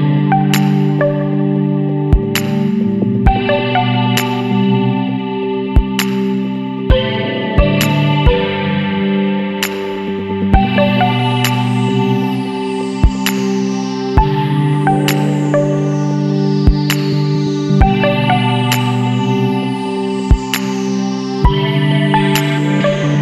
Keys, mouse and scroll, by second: 0.1 click, 3.1 click, 5.2 click, 5.9-6.5 scroll down 2, 6.8 scroll down 2, 11.7 click, 13.7 click, 16.3 click, 19.6 scroll down 1, 20.4 click, 20.5 middle click, 20.7-23.0 drag, 23.0 scroll down 2.